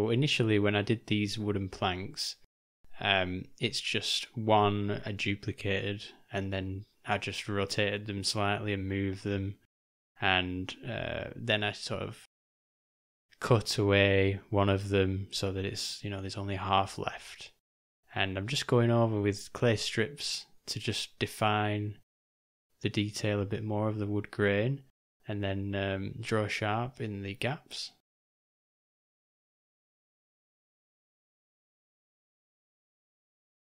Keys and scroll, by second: 12.6 j, 13.1 ], 13.3 ], 20.5 j, 22.3 u.